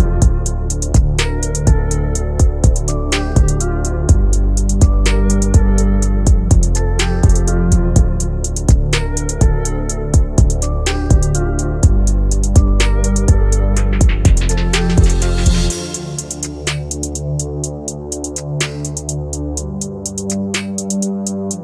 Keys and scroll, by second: 2.2 Caps_Lock, 3.2-6.4 typing, 8.0 c, 8.7 e, 9.0 n, 9.3 Down, 10.2 Down, 10.6 Up, 11.0 Return, 12.3 Down, 13.2 Return.